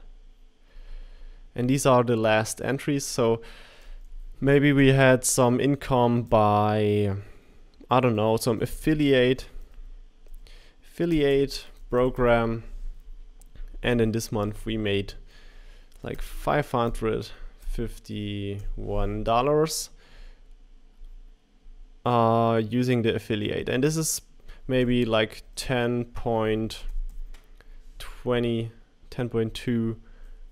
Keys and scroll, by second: 8.2-13.0 typing, 16.6-18.6 typing, 25.4-26.4 typing, 26.8 Tab.